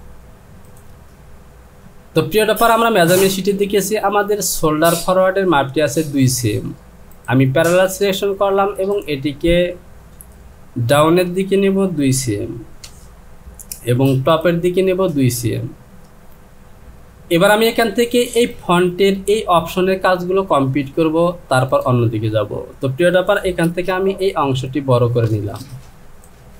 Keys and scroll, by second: 11.1 Down, 12.2 KP_2, 12.8 Return, 15.9 Down, 23.7 Return.